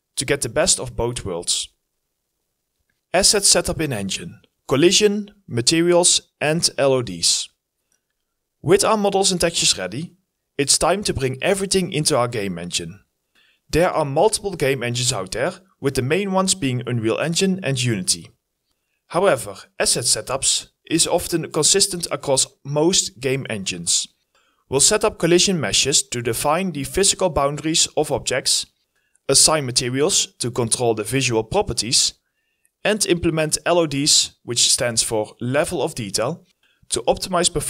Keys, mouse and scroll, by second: 13.8-14.7 scroll down 1, 14.8-17.2 scroll down 1, 18.4 Delete, 19.8 e, 20.7 right click, 21.0-22.6 typing, 21.1 right click, 21.7 scroll, 21.8-22.6 scroll down 2, 26.2-28.4 typing, 26.4 right click, 28.1 right click, 29.0 right click, 32.3 right click, 32.6 w, 33.9 right click, 34.2 scroll down 1, 34.3-35.0 typing, 36.1 right click, 36.6 s.